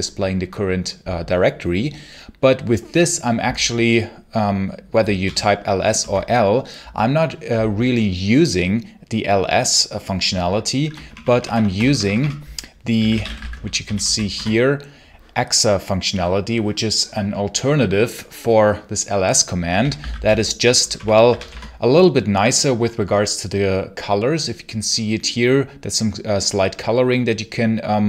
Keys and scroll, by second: 5.1 l, 5.8 Return, 10.9 ctrl+shift+=, 11.4 ctrl+shift+=, 11.7 ctrl+BackSpace, 12.6-14.2 typing, 14.2 Return, 19.4-21.7 typing.